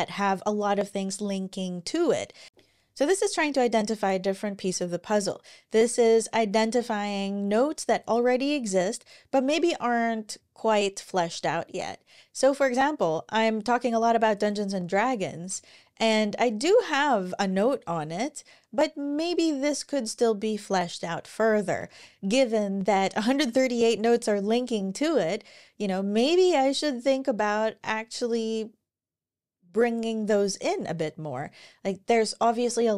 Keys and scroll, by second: 21.6 ctrl+shift+Tab.